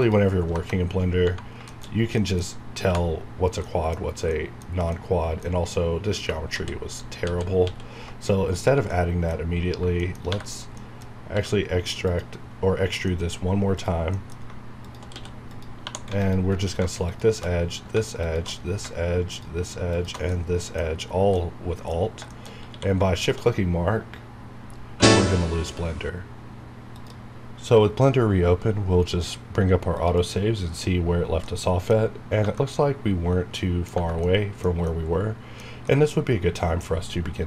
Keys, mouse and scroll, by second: 0.5 KP_Enter, 1.1 scroll down 1, 1.7 shift+middle click, 2.2 middle click, 2.5-3.1 scroll up 2, 3.7 middle click, 4.6 scroll down 1, 4.9 middle click, 5.5 scroll up 1, 6.5 ctrl+z, 8.3 scroll down 1, 8.9 middle click, 10.0 middle click, 10.0 scroll up 1, 10.3 3, 10.5 click, 10.8 middle click, 11.1 scroll up 1, 11.4 e, 12.1 click, 13.1 middle click, 13.4 scroll up 1, 13.8 click, 14.2 middle click, 14.4 scroll down 1, 14.9 shift+click, 15.9 2, 16.2 alt+click, 17.7 scroll down 1, 18.6 shift+scroll down 1, 19.3 alt+shift+click, 20.3 shift+middle click, 21.0-21.3 scroll up 1, 21.4 middle click, 22.0-22.7 scroll up 3, 22.3 shift+middle click, 22.7 q, 23.1 shift+click, 30.1 click, 31.0 scroll down 1, 31.4 middle click, 32.4 Tab, 32.5-33.9 middle drag, 33.9 Tab, 34.2-37.4 middle drag.